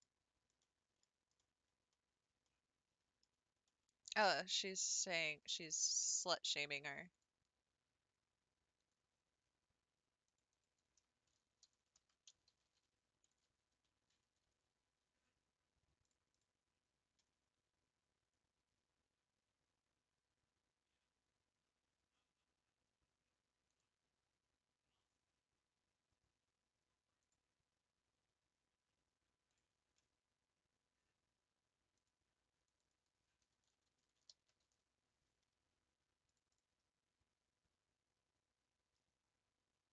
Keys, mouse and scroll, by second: 0.0-0.6 scroll down 4, 0.6-1.0 middle drag, 1.0-1.4 scroll down 3, 1.4-3.3 middle drag, 3.3-3.7 scroll up 3, 3.7-5.0 middle drag, 5.0 Tab, 9.1-18.9 drag, 29.7-36.7 drag.